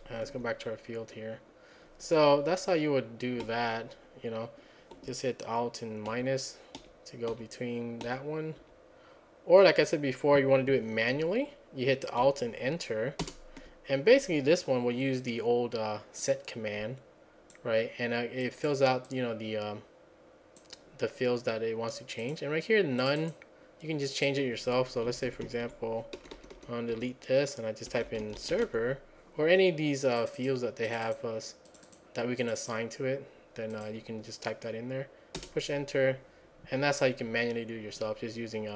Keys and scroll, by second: 6.2 alt+-, 6.8 alt+-, 7.3 alt+-, 8.1 alt+-, 8.6 alt+-, 13.3 alt+Return, 25.3 Right, 25.5 Right, 25.7 Right, 26.6 Right, 27.7-29.2 typing, 35.4 Return.